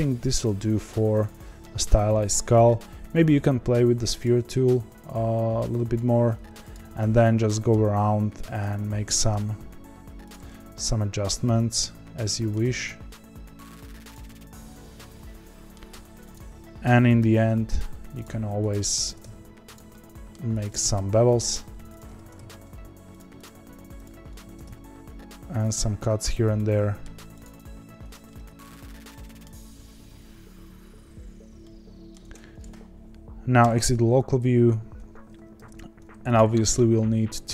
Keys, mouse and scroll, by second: 1.7 a, 2.9 click, 4.2 click, 6.7 click, 6.9 1, 7.2-8.6 middle drag, 8.6 click, 9.3 g, 10.4-12.6 middle drag, 12.6 g, 14.2-16.3 middle drag, 16.3 click, 17.2 ctrl+b, 18.7 click, 19.0 ctrl+b, 19.9 middle click, 20.6 click, 20.7 ctrl+b, 21.9 click, 22.1 ctrl+b, 23.4 click, 24.0 click, 24.4 ctrl+b, 25.8 ctrl+t, 26.5 middle click, 27.4 click, 28.0 Tab, 28.2-29.7 middle drag, 29.7 Tab, 31.6 middle click, 32.2 Tab, 33.6 KP_Divide, 35.6 g, 36.6 s.